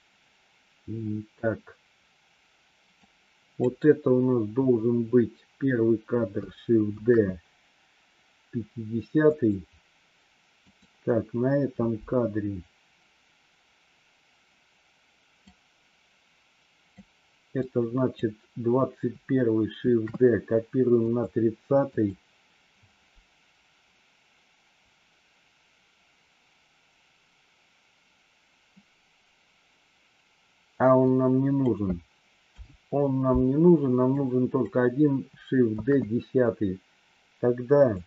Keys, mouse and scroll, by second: 2.9 click, 6.9 shift+d, 10.6 click, 15.3-16.9 drag, 17.4 click, 19.7 shift+d, 21.8 click, 30.9 click, 32.4 Delete, 34.1 click, 35.7 shift+d.